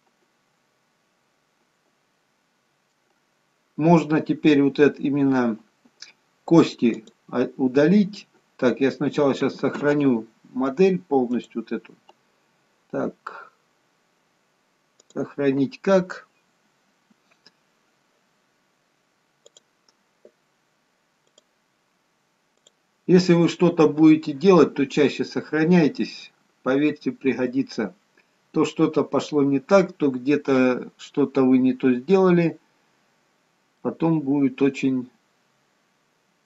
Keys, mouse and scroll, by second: 3.6-4.7 scroll up 1, 4.9-6.5 scroll down 1, 7.0 click, 11.3 click, 26.2-26.7 scroll up 2, 26.7-29.4 scroll down 1, 29.4-29.8 scroll down 1, 32.8-33.2 scroll up 1, 33.2-33.7 scroll down 2, 33.7 middle click.